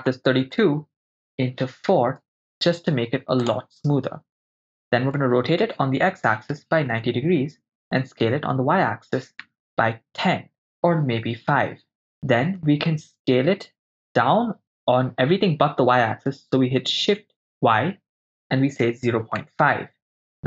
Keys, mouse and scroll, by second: 3.5-5.2 drag, 5.2 r, 5.7 x, 6.5 9, 6.5 0, 6.9 Return, 8.0 s, 8.6 y, 9.5 1, 9.6 0, 11.1 BackSpace, 11.2 5, 12.0 Return, 12.0 5, 12.0 BackSpace, 14.0 s, 17.6 shift+y, 19.1 0, 19.1 ., 19.4 5, 20.2 Return.